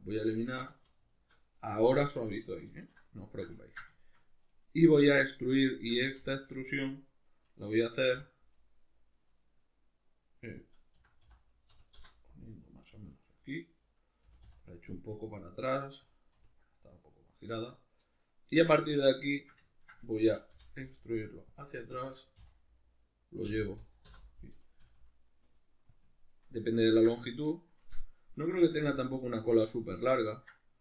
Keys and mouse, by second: 0.6 2, 1.1 alt+right click, 2.7 alt+q, 3.3-10.7 ctrl+shift+middle drag, 6.1 e, 10.7 click, 10.9 s, 12.0 Return, 14.3 g, 16.2 click, 16.3 r, 17.2 click, 18.8-21.6 shift+middle drag, 20.2 e, 21.6 click, 21.9 s, 24.1 Return, 24.9 s, 26.0 click, 26.2-29.9 ctrl+middle drag, 28.5 g, 29.9 click.